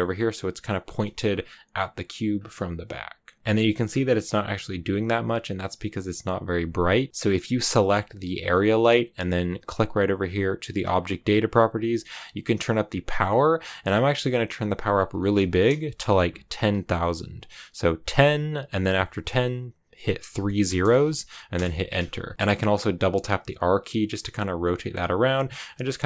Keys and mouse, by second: 0.6 click, 0.9 g, 1.1 click, 3.4 KP_0, 3.5 shift+middle click, 7.6 g, 8.2 click, 11.7-12.9 drag, 13.7-21.9 drag, 20.3 0, 20.4 0, 22.3 r, 24.7 click, 24.9-26.0 typing, 25.6 click, 25.8 click.